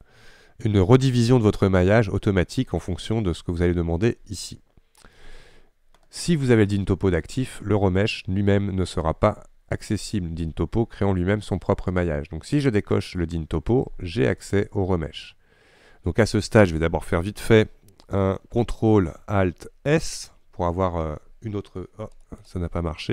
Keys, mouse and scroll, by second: 22.5-23.1 middle drag.